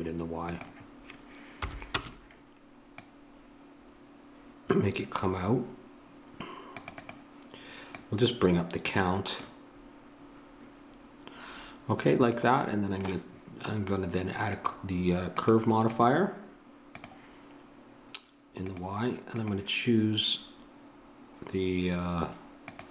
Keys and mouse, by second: 9.5-14.5 middle drag, 14.5-22.9 drag.